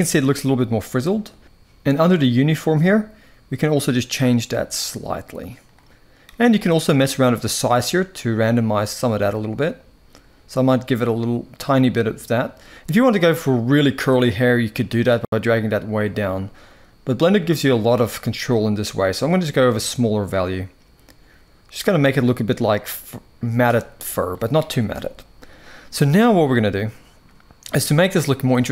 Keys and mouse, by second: 2.5-5.5 drag, 6.3-23.3 drag, 24.6 KP_1.